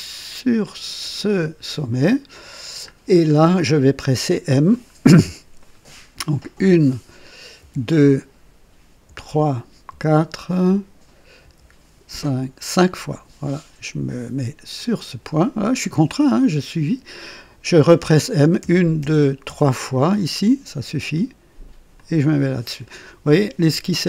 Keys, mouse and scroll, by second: 1.0 click, 1.9 right click, 2.9-3.3 scroll down 1, 3.6 right click, 4.9 scroll down 1, 5.5 right click, 6.5 typing, 7.6 typing, 9.0-9.9 typing, 11.4 typing, 14.7 click, 16.4 right click, 18.6-19.4 typing, 21.9 click, 22.7-23.1 scroll down 1, 23.3 right click.